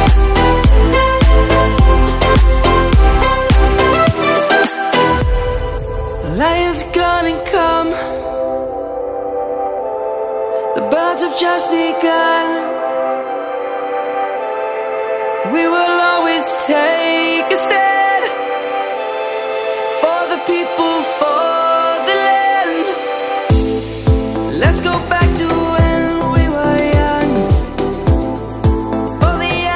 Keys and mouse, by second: 1.0 Tab, 1.9 click, 3.6 middle click, 4.6 middle click, 5.6 1, 7.4 shift+middle click, 9.9 middle click, 11.6 shift+middle click, 13.0 middle click, 14.8 ctrl+z, 15.3 ctrl+z, 17.6 middle click, 19.5 click, 22.1 shift+middle click, 23.3 shift+middle click, 24.4 click, 26.3 2, 26.7 click, 28.2 ctrl+x, 29.3 click.